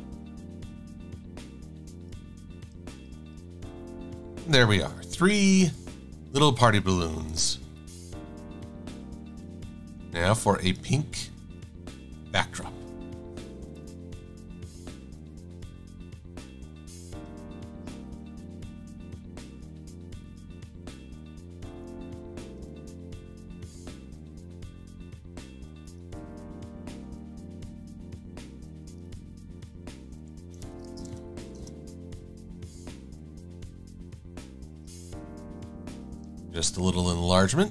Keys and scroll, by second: 1.5 v, 2.5 shift+x, 3.4 shift+a, 4.1 super+-, 29.7-31.3 typing.